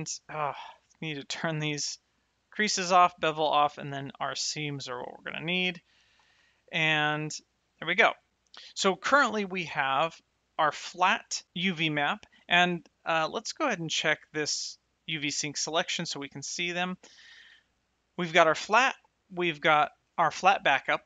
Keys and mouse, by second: 1.3 click, 4.9 shift+middle click, 6.7 a, 7.5 middle click, 9.3 click, 15.0 click, 18.8 click.